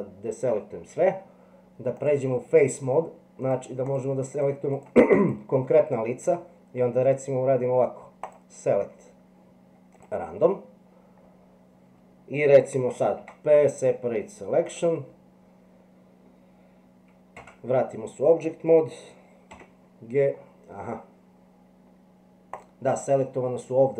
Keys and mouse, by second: 2.0 click, 3.9 click, 4.3 click, 4.8 click, 5.2 click, 8.4-10.0 drag, 13.2 p, 17.4 Tab, 19.5 g.